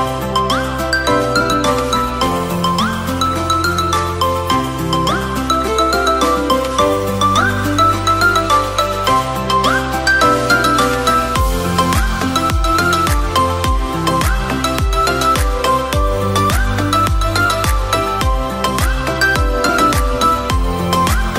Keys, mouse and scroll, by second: 0.6-1.6 shift+middle drag, 1.6 r, 11.2-12.2 scroll up 4, 12.2 click, 13.5-14.7 scroll down 4, 14.7 click, 15.5 click, 17.5 click, 18.9 shift+click, 20.2 ctrl+j, 21.2 Tab.